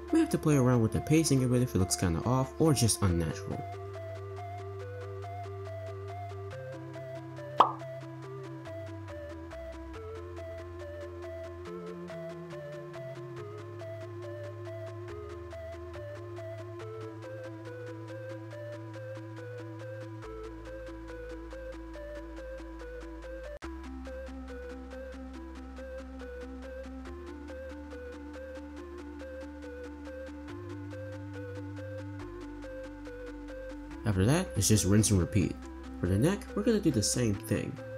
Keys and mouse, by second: 1.2 ctrl+z, 2.1-3.3 drag, 3.8 r, 5.8 click, 5.9-19.1 typing, 6.9 click, 8.1 click, 9.1 click, 10.3 click, 11.0 click, 12.0 click, 12.2 click, 13.1 click, 13.8 click, 15.1 click, 16.0 click, 16.7 click, 17.9 click, 18.6 click, 19.8-20.3 drag, 20.5-27.2 typing, 21.4 click, 22.1 click, 23.4 click, 24.7 click, 25.9 click, 26.9 click, 27.0 click, 28.2 click, 28.3-32.7 typing, 29.2 click, 30.4 click, 31.8 click, 34.4 click, 34.9 space, 36.0 click, 37.4 click.